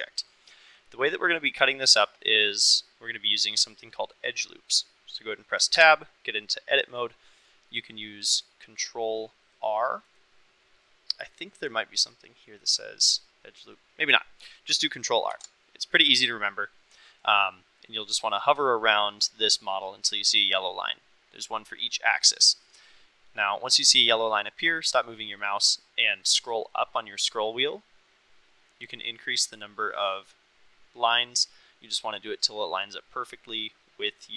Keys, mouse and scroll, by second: 5.7 Tab, 10.1-13.9 right drag, 15.2 ctrl+r.